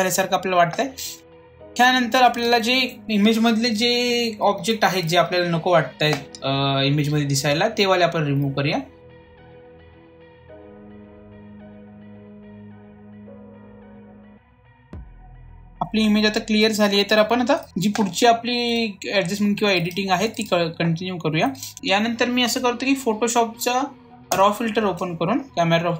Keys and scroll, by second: 4.6 ctrl+j.